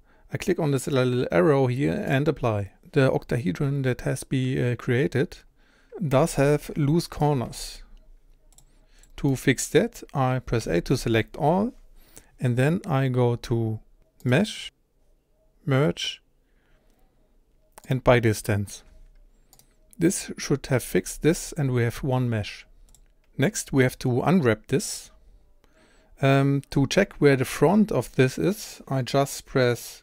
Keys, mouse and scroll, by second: 2.1-6.1 drag, 6.1 Tab, 6.7 1, 7.2 click, 7.5 g, 9.3-10.6 middle drag, 10.6 a, 19.6 click, 21.0 g, 26.1-26.4 scroll down 1, 26.4-30.0 scroll up 1.